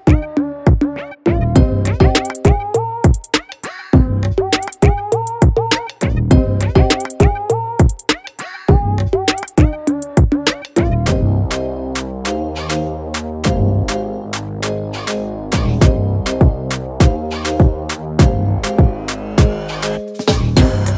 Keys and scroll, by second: 0.0-0.5 typing, 1.2 ctrl+b, 3.7 Return, 4.1 z, 5.7-9.5 typing, 11.5 ], 12.7-19.6 typing, 13.7 ctrl+-, 14.6 ctrl+0, 20.7 ctrl+z, 20.8 ctrl+z.